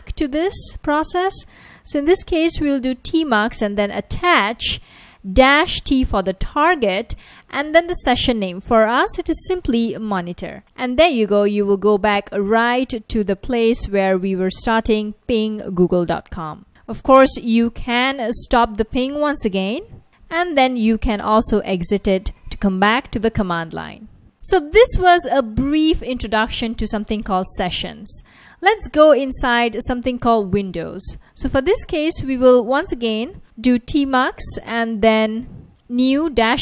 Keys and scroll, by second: 1.0-7.1 typing, 8.2-10.6 typing, 17.6 ctrl+c, 21.0-22.3 typing, 33.3 Up, 34.7 Up, 35.3 Up.